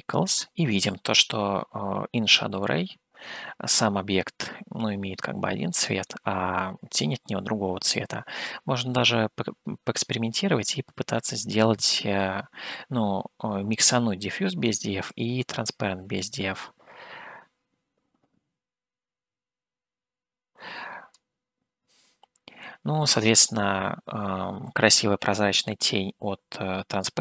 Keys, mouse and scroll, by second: 6.2-12.6 middle drag, 15.2-21.3 drag.